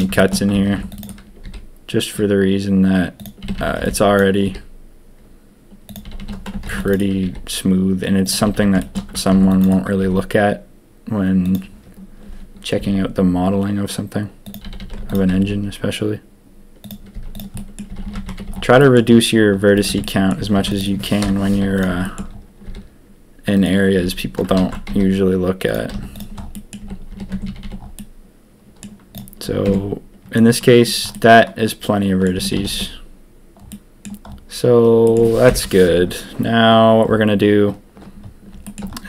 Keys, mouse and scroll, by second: 0.7 ctrl+r, 1.4 s, 3.4 a, 3.5 a, 4.1 b, 4.4 s, 6.0 a, 6.1 a, 6.6 ctrl+r, 7.2 s, 8.4 a, 8.5 a, 8.8 shift+middle click, 9.2 ctrl+r, 10.0 s, 12.7 s, 14.6 a, 14.8 a, 15.0 alt+click, 15.4 s, 17.1-18.4 typing, 17.5 middle click, 18.1 Tab, 18.7 drag, 19.7 click, 19.8 Tab, 20.0 click, 20.5 ctrl+r, 21.2 ctrl+KP_3, 21.5 z, 22.6 s, 23.9 a, 24.5 ctrl+z, 24.8 s, 25.9-27.6 typing, 26.5 click, 27.3 Tab, 27.9 click, 29.1 click, 29.6 Tab, 30.3 click, 31.1-33.1 middle drag, 33.1 a, 33.7-34.0 middle drag, 35.0 click, 35.4 ctrl+KP_1, 38.6 shift+drag.